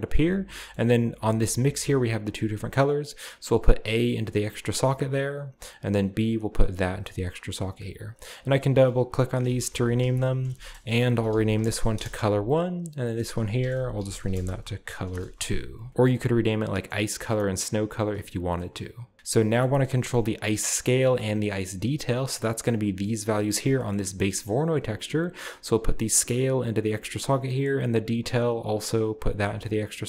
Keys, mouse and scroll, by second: 0.2-1.7 scroll up 1, 2.8-5.9 drag, 6.0-7.4 drag, 8.1 click, 8.2 click, 9.5-15.9 typing, 13.0 click, 16.1-16.7 drag, 16.9-18.1 scroll up 1, 17.0-17.5 middle drag, 17.0 typing, 17.5 click, 18.6-19.1 middle drag, 19.1 g, 19.4 middle click, 19.9-20.5 middle drag, 20.5-21.6 drag, 21.6 middle click, 21.6-22.4 scroll up 1, 21.6 typing, 23.2-23.8 drag, 23.8-24.3 middle drag, 24.5-25.2 middle drag, 25.2-27.5 drag, 27.6-30.0 drag.